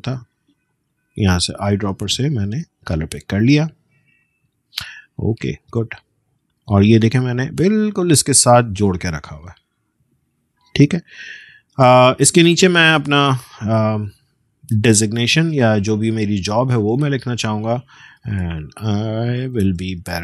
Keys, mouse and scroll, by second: 4.7 click, 5.3-6.3 alt+scroll down 1, 7.7 space, 7.9 click, 8.2 space, 9.8-10.6 alt+scroll down 1, 10.9 space, 11.1 click, 11.4 space, 13.5-17.4 alt+drag, 18.3 ctrl+a, 20.0-20.2 typing.